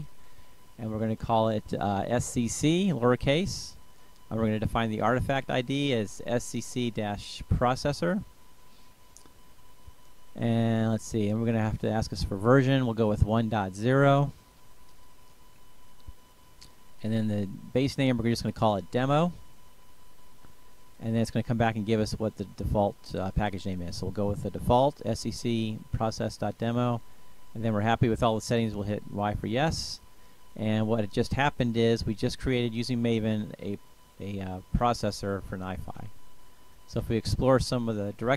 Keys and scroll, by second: 0.1 c, 1.5 Return, 4.7-8.8 typing, 11.1 Return, 14.0-15.2 typing, 15.7 Return, 17.7-19.0 typing, 19.8 Return, 24.5 Return, 26.6 y, 28.1 Return.